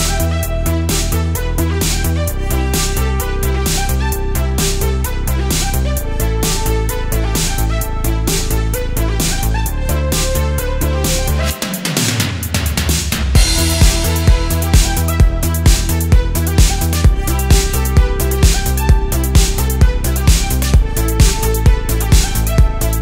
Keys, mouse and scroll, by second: 2.4 click, 3.4 g, 3.8 y, 6.5 click, 6.5 x, 8.7 click, 9.5 middle click, 11.8 click, 13.3-14.4 middle drag, 15.0 scroll up 1, 15.2 middle click, 16.8 g, 17.2 z, 19.9 click, 21.1 click, 22.8 click.